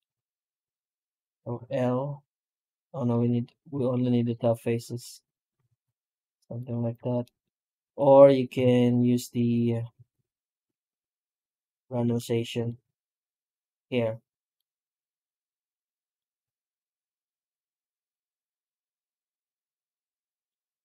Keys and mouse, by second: 0.0 shift+middle drag, 0.6 alt+a, 1.4 l, 3.0 right click, 4.0 ctrl+right click, 5.1 ctrl+right click, 5.5 alt+s, 6.6 Tab, 7.1 middle drag, 7.5 right click, 7.7 x, 8.5 shift+q, 9.4 right click, 9.8 shift+q, 19.5-20.1 middle drag.